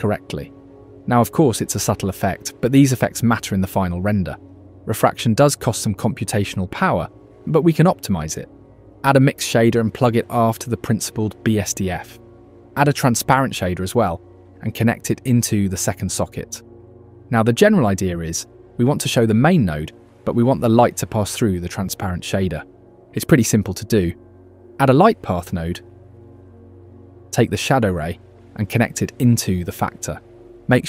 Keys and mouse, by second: 1.0 KP_3, 6.5 click, 7.7 shift+a, 8.9 Down, 13.0 click, 14.3-16.2 drag, 16.4 shift+a, 21.5-22.5 alt+drag, 24.1 shift+a, 27.2 click.